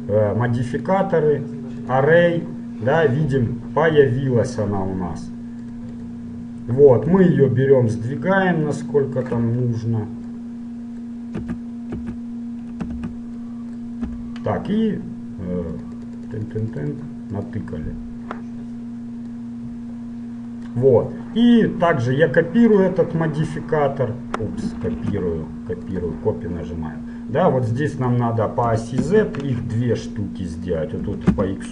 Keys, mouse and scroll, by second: 2.8-5.6 middle drag, 5.9-9.1 drag, 9.9-11.0 middle drag, 11.6 a, 12.4 a, 13.0 Tab, 14.2 KP_1, 16.0-19.4 drag, 19.6-21.5 drag, 22.9-24.6 drag, 25.2 ctrl+z, 26.0-27.8 drag, 27.8 middle click, 28.2-30.1 drag, 30.8-31.7 drag.